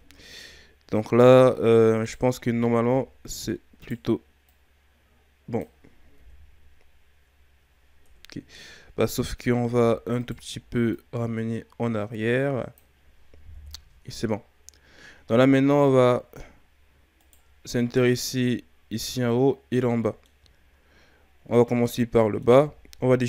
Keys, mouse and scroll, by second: 0.3 scroll down 1, 2.0 alt+right click, 2.9 g, 4.4-6.2 drag, 6.2 KP_1, 9.0 KP_3, 10.2 alt+right click, 11.0-13.5 drag, 13.5 KP_1, 16.1-17.1 shift+scroll up 7, 17.1 right click, 17.6-18.0 ctrl+scroll down 4, 18.0-20.4 middle drag, 20.4-20.9 scroll down 3, 21.4 scroll down 1, 21.7-23.2 middle drag.